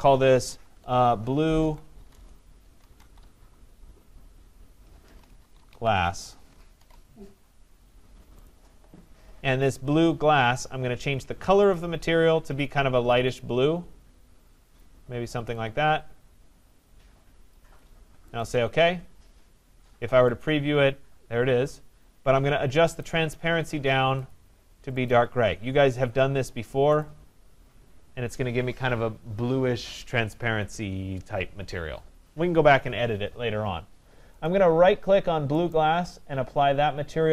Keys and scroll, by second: 2.1 BackSpace.